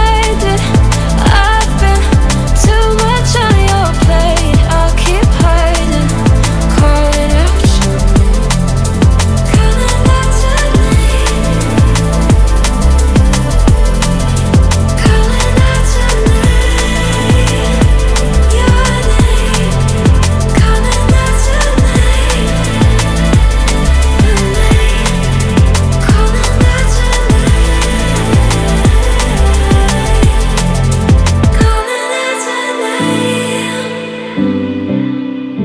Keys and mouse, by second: 0.5 click, 3.3 click, 4.3 ctrl+r, 6.7 click, 7.1 x, 8.8 ctrl+r, 16.4 click, 21.7 click, 24.0 click.